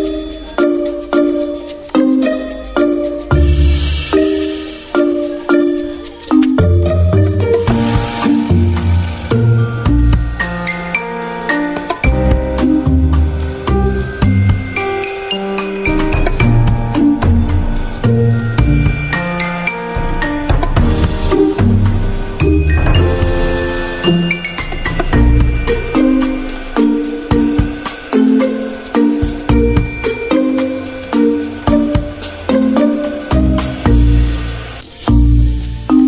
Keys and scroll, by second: 1.9 v, 11.5 z, 22.4 ctrl+z, 23.1 y, 24.1 Delete, 24.8 z, 26.4 v, 28.4 ctrl+z, 28.9 z, 30.2 ctrl+z, 30.7 ctrl+z, 31.1 v, 33.1 Delete, 34.1 y.